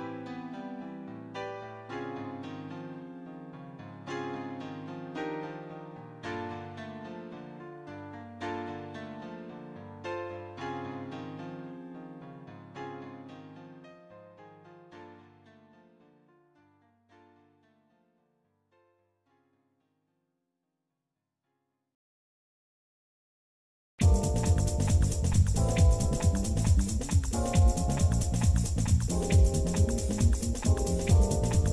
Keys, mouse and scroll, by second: 1.2-2.4 scroll down 7, 2.6 middle click, 3.2-4.5 shift+middle drag, 4.7 middle click, 5.2 shift+middle click, 6.4 middle click, 7.1 click, 8.4 middle click, 9.6 shift+middle click, 10.4 middle click, 11.7 scroll down 1, 12.3-13.7 shift+middle drag, 14.8 middle click, 16.0 shift+middle click, 17.4 shift+middle click, 18.4 scroll up 1, 19.9 alt+c, 20.7 middle click, 21.4 click, 22.6 alt+c, 24.0 ctrl+s, 24.9 middle click, 25.5 shift+middle click, 25.9 click, 26.2 Tab, 26.8 scroll up 1, 27.4-29.6 shift+middle drag.